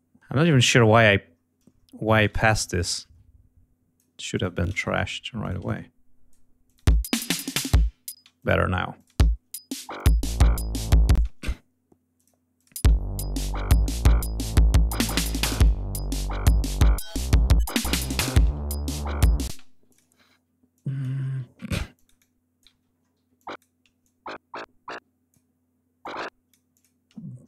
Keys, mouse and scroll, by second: 0.5 ctrl+scroll down 2, 2.0 shift+click, 2.2 shift+right click, 2.6-4.1 ctrl+shift+drag, 4.3 click, 4.7 shift+right click, 5.3 ctrl+click, 6.5 click, 6.7 space, 8.0 space, 8.3 click, 8.9 click, 9.0 space, 10.0-10.3 scroll up 2, 11.0 space, 12.0 click, 12.4 click, 12.7 space, 12.8-13.3 scroll down 2, 13.6-13.9 scroll up 2, 16.5 click, 18.3 alt+d, 19.4 space, 19.8 click, 21.2 scroll up 2, 22.6 ctrl+y, 22.8 ctrl+scroll up 2, 23.3 ctrl+e, 23.9-25.4 ctrl+drag, 25.9 click, 26.6 click, 27.4 g.